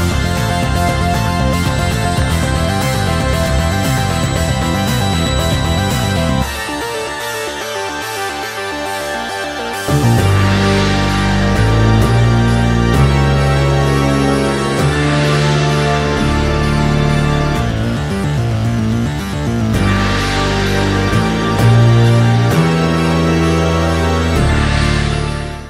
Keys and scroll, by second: 6.3 space, 9.5 Return, 12.9 space, 18.8 Escape.